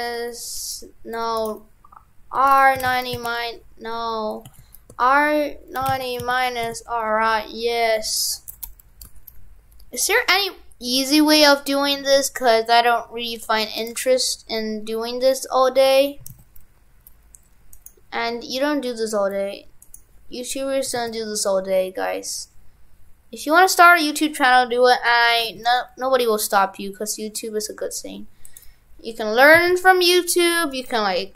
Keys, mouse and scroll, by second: 1.5 right click, 17.8 right click.